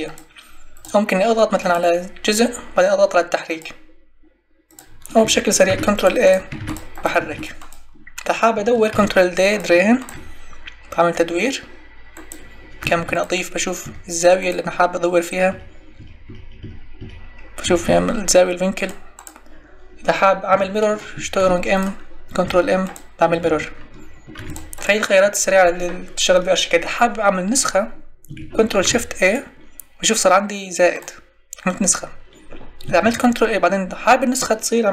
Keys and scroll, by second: 5.6 ctrl+e, 8.9 ctrl+d, 12.9 ctrl+d, 15.5 Tab, 21.3 ctrl+m, 24.3 ctrl+m, 28.8 ctrl+shift+e, 33.0 ctrl+e.